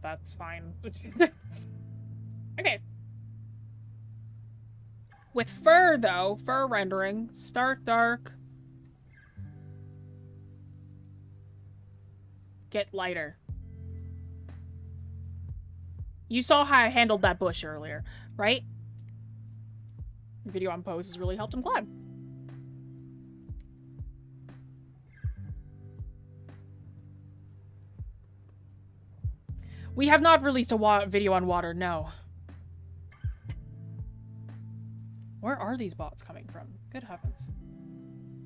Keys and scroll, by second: 4.0 scroll, 5.3 scroll.